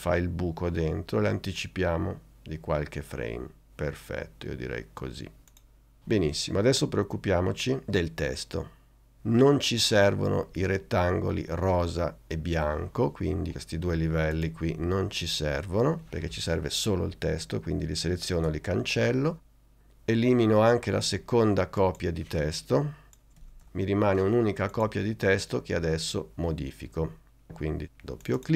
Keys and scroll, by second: 18.5 BackSpace, 23.4 shift+BackSpace.